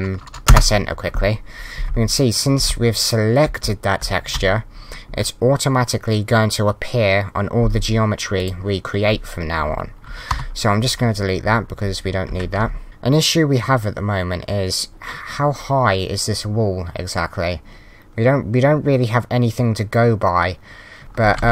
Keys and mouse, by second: 0.5 Return, 1.8 Left, 2.0 w, 2.6 Left, 4.3 Right, 8.4 click, 10.3 Delete, 11.8 Right, 12.4-13.2 typing.